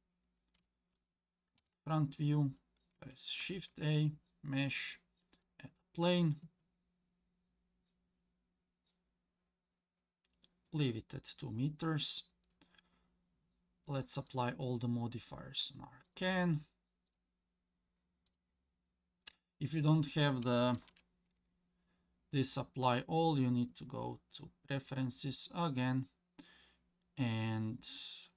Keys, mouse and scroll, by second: 0.1 scroll down 1, 0.6-1.0 shift+middle drag, 1.6 KP_1, 3.4 shift+a, 12.4 click, 14.3 click, 16.1 click, 17.1 click, 18.3 click, 20.8 ctrl+z, 23.6-24.9 drag.